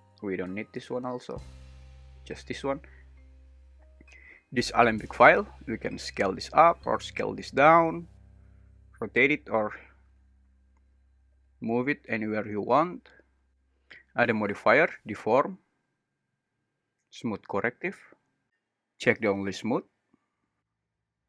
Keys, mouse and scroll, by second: 0.4 x, 5.9 s, 7.9 Escape, 8.6 r, 10.2 Escape, 11.3 g, 12.9 Escape, 14.2-17.4 drag, 20.8-21.2 drag.